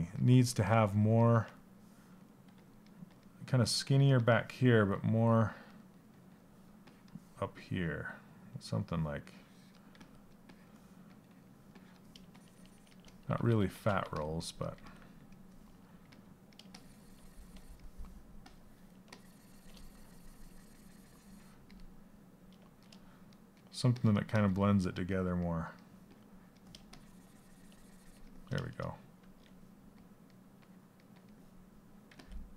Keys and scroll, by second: 9.5 s, 12.9 ctrl+z, 14.3 s, 15.6 s, 31.6 s.